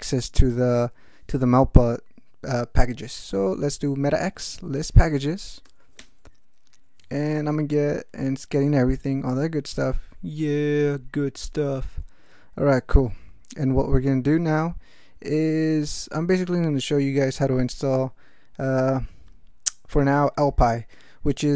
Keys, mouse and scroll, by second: 3.3 alt+x, 4.1-5.4 typing, 5.6 Tab, 6.0 Return.